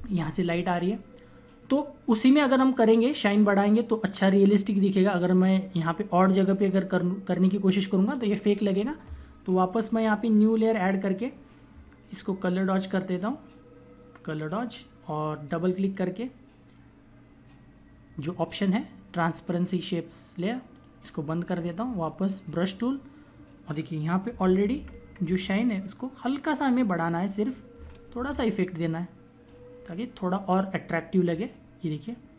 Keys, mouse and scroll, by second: 10.1 click, 14.6 click, 20.6 click, 23.9-25.1 typing, 27.5-28.0 typing, 28.4 click, 31.4 click.